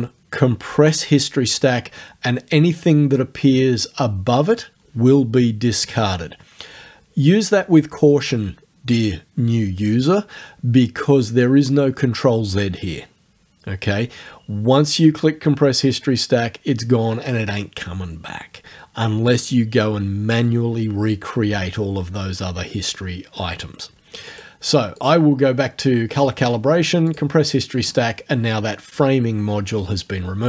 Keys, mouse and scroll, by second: 24.3 click, 25.0 click, 27.1 click.